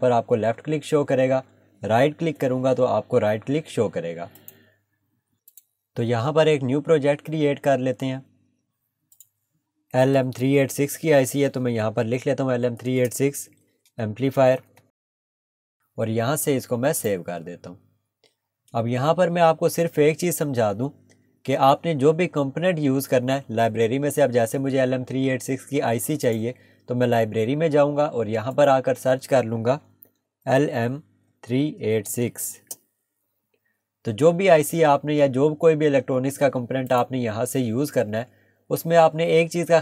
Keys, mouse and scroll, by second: 2.2 right click, 2.3 right click, 4.4 click, 7.0 click, 9.9 typing, 12.9-13.9 typing, 15.0-15.5 typing, 16.9 click, 20.7 scroll up 1, 26.2 click, 30.3 typing, 36.9 click.